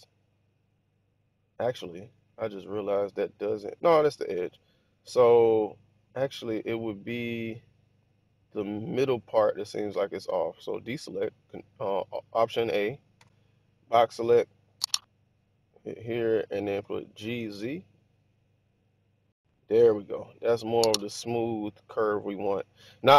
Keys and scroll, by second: 2.1 1, 7.8-8.5 typing, 10.9 alt+a, 13.0 b, 16.4-17.3 typing.